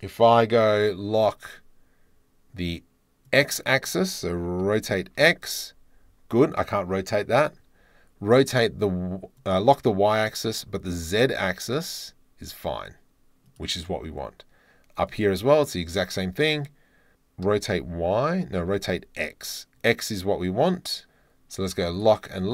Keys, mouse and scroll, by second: 3.2 click, 4.6 r, 5.0 x, 7.1 click, 9.3 click, 10.9 r, 11.4 z, 15.0 click, 17.4 click, 17.4 r, 17.7 click, 17.7 y, 18.7 x, 21.9 click, 22.3 click.